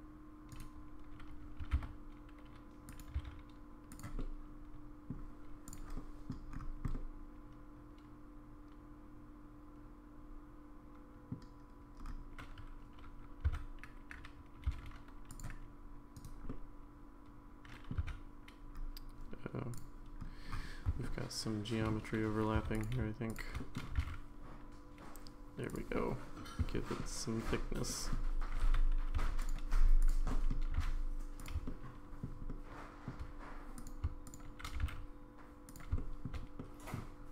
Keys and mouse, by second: 1.6 g, 3.1 s, 4.2 middle click, 5.6 click, 5.9 middle click, 6.9-11.3 middle drag, 13.5 3, 14.6 c, 16.5-17.9 middle drag, 19.7 click, 19.7 1, 21.0 shift+middle click, 22.7 click, 23.3 shift+click, 23.6 middle click, 23.9 g, 25.9-27.0 middle drag, 27.9 middle click, 29.1 2, 30.3 middle click, 30.7 g, 31.6 shift+middle click, 32.5 middle click, 33.7 click, 34.2 shift+click, 34.7 g, 36.0 middle click, 36.6 middle click.